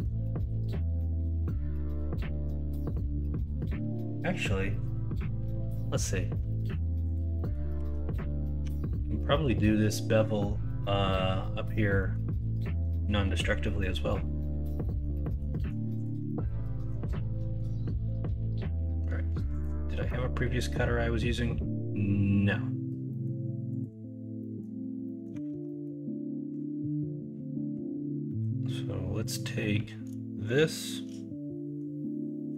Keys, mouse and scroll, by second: 0.7-2.8 middle drag, 6.5 middle drag, 7.3 middle click, 7.7 Tab, 8.7 Tab, 12.0 middle drag, 14.8 middle drag, 15.2 middle drag, 15.6 middle click, 16.2 middle click, 16.7 middle drag, 17.2 middle click, 17.8 middle click, 20.0-22.8 middle drag, 23.0 middle drag, 24.4 middle drag, 25.0 middle drag, 25.3 Tab, 25.6 middle click, 28.2 middle click.